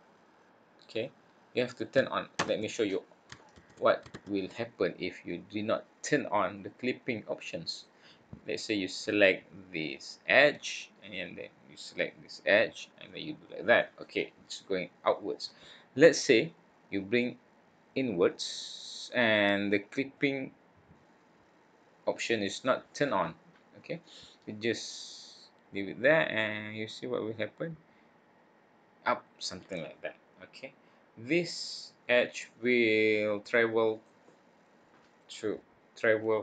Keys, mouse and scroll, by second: 3.5 ctrl+z, 4.1 ctrl+z, 7.7 click, 11.0 click, 13.0 click, 17.1 click, 25.3 click, 30.5 click, 32.9 click.